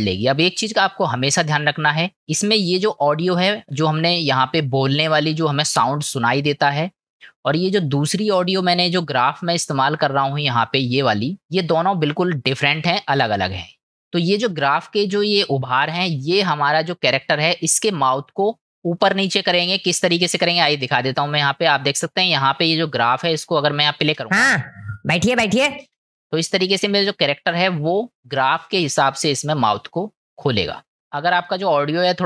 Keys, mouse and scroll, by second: 2.3 click, 8.0-8.6 drag, 9.3 click, 21.2 click.